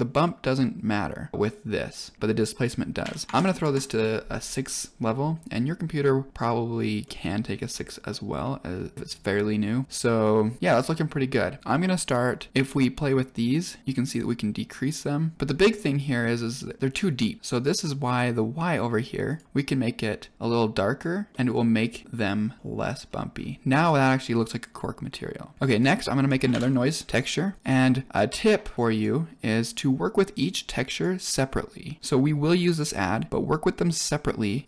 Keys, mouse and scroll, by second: 5.9-6.3 middle drag, 6.3 scroll up 2, 7.0 middle click, 7.7-8.0 scroll down 1, 8.0-8.4 middle drag, 8.6 scroll down 2, 8.9 shift+middle click, 10.2 click, 12.6 click, 14.1 click, 15.7-16.1 middle drag, 16.3 scroll up 3, 17.7 click, 19.2 click, 21.3-21.6 middle drag, 21.9 middle click, 22.6 middle click, 23.0-23.3 scroll down 3, 25.7 click, 26.2 click, 26.4 shift+a, 27.6 click, 28.7-29.0 drag, 30.4-31.0 drag, 31.1 click, 31.6-32.8 drag, 33.7-34.6 drag.